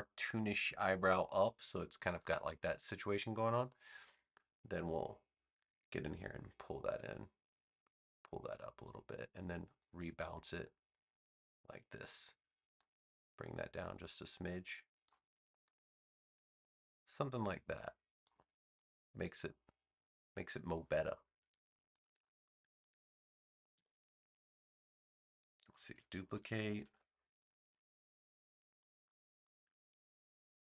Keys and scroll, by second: 23.7 BackSpace, 25.8 super+j, 26.7 v.